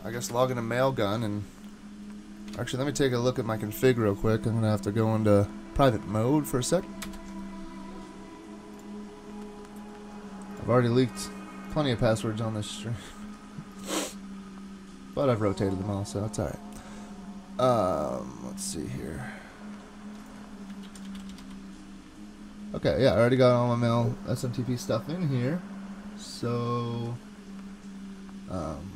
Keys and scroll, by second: 0.3 super+Tab, 2.5 super+Tab, 7.0 alt+super+0.